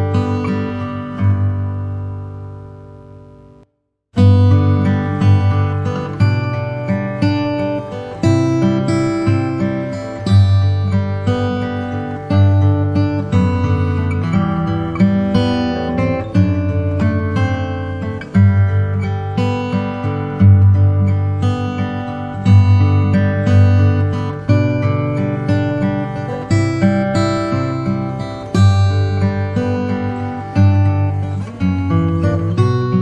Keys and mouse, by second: 1.3-4.7 drag, 12.8 KP_3, 14.6 g, 16.9 s, 18.8 KP_0, 25.6 click, 26.6-30.4 drag, 32.4 click, 32.6 click.